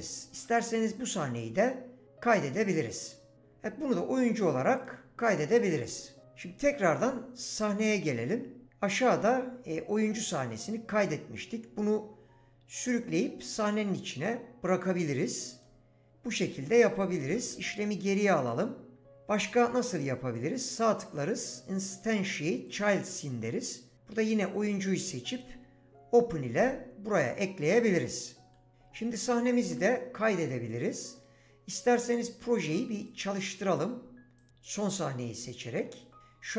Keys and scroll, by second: 17.2 ctrl+z, 29.6 ctrl+s.